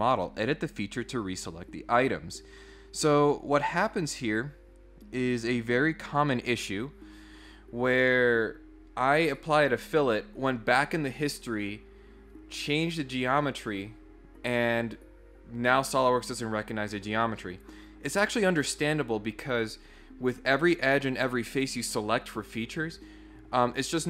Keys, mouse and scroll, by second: 3.2 click.